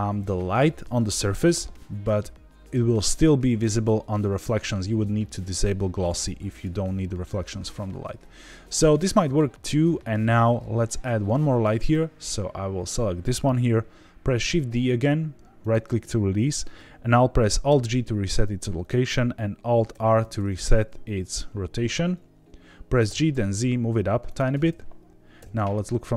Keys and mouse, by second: 5.5 click, 6.5 click, 11.7 click, 14.3 shift+d, 15.6 right click, 17.6 alt+g, 19.9 alt+r, 23.0 g, 23.3 z, 24.2 click, 25.3 KP_7.